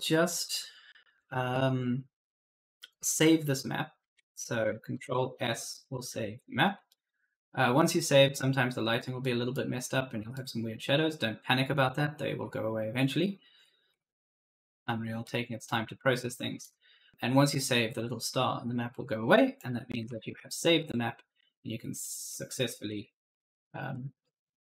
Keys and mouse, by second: 0.1 click, 4.8 ctrl+s, 6.7 right click, 9.1 right click, 10.2 right click, 12.2 right click, 12.2 d, 12.7 a, 13.3 s, 13.7 a, 15.1 right click, 15.3-16.6 typing, 19.4 click, 19.9 ctrl+s, 21.9-23.8 typing, 21.9 right click, 22.5 right click, 22.8 right click, 23.2 right click, 23.4 right click.